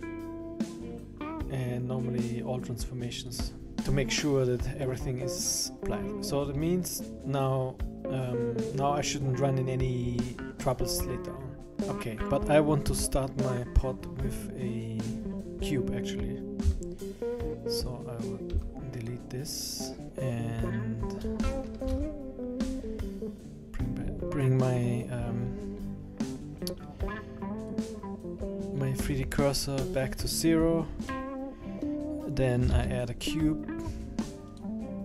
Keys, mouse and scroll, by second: 4.0-4.4 scroll up 3, 4.4 scroll down 3, 4.9 middle click, 5.5 middle click, 6.4 Escape, 6.8 right click, 7.9 scroll down 2, 8.1 right click, 9.9 scroll down 2, 10.0 Escape, 10.3 right click, 10.8-11.7 scroll up 4, 11.7-14.3 scroll down 1, 14.3-14.8 scroll down 1, 17.8 right click, 18.5 x, 20.0-20.5 scroll down 2, 20.5-21.4 scroll up 1, 21.8 shift+c, 22.6-23.6 scroll up 5, 23.9-24.8 scroll up 5, 25.3-27.6 scroll up 4, 27.6 click, 29.0 Escape, 29.3 Escape, 29.8-30.3 scroll up 6, 30.3-31.1 scroll down 6, 32.7 shift+a.